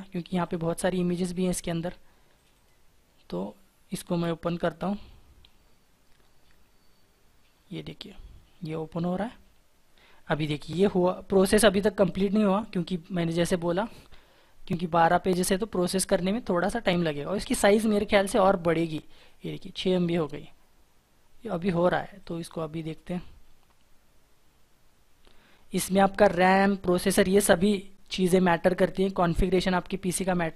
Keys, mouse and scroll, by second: 0.8 double click, 14.8 right click, 18.7 double click.